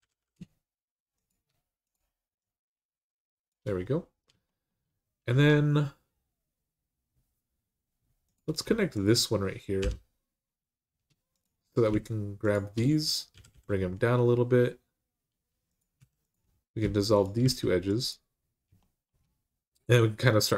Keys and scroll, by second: 9.6 j, 13.1 g, 13.3 g, 15.8 2, 17.2 x.